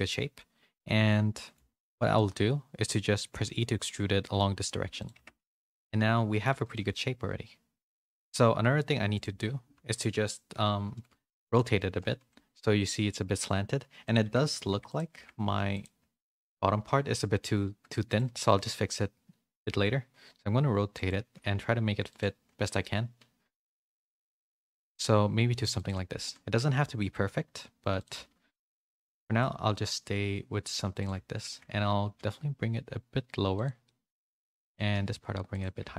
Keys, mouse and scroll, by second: 0.0 shift+middle click, 0.4-1.5 middle drag, 1.8 middle click, 2.1-3.3 middle drag, 5.1 Tab, 5.3 a, 5.5 a, 5.6 middle click, 6.6 a, 6.8 a, 6.9-8.1 middle drag, 7.8 a, 7.9 a, 8.1 click, 9.8 KP_3, 11.2 z, 14.2 Tab, 14.8 click, 15.7-17.8 drag, 18.0 shift+click, 18.8 r, 21.2 g, 22.3 r, 24.2 g, 26.9 g, 28.1 z, 28.5 middle click, 29.0 a, 29.2 a, 29.3-30.6 middle drag, 30.9 click, 31.3 shift+click, 32.1 g, 33.9 middle click, 34.6 click, 34.8 g, 35.8 Tab.